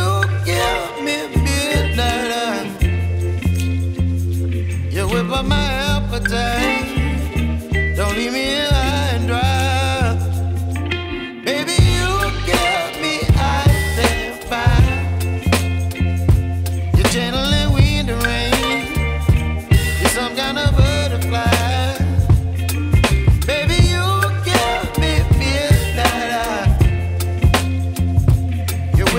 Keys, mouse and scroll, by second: 0.1 double click, 0.2 ., 0.5 5, 0.6 Return, 3.5 Return, 3.5 5, 5.8 right click, 22.4 right click.